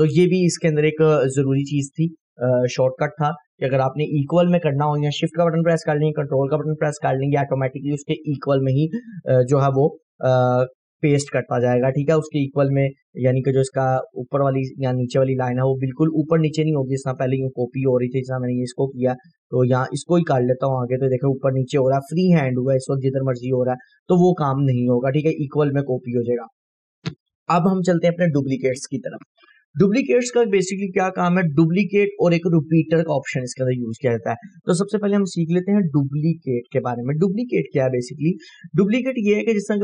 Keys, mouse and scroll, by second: 16.9 click, 18.9 right click, 19.4-23.7 drag, 27.3 Delete.